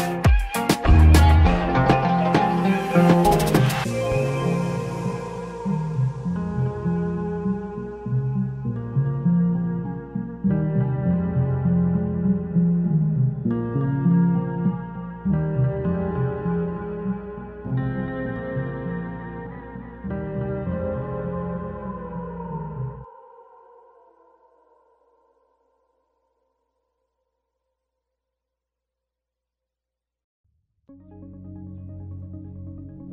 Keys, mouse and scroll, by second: 2.0 Tab, 2.3-2.7 scroll down 3, 2.7-3.4 middle drag, 3.4 scroll up 1, 3.5-4.5 scroll down 7, 4.5 scroll up 1, 4.6-5.3 middle drag, 5.3 scroll up 2, 5.4-5.9 shift+middle drag, 5.9 scroll up 1, 6.1-8.0 middle drag, 8.0 click, 8.7 click, 9.2 ctrl+z, 9.5-12.7 drag, 14.3 s, 16.0 click, 18.2-19.9 middle drag, 20.1 alt+middle click, 20.5 scroll down 1, 21.3 g, 23.5 click, 24.4 click, 24.9-25.3 scroll up 1, 25.3 click, 26.0 s, 27.3 click, 28.5 click, 29.5-32.6 drag, 32.7 g.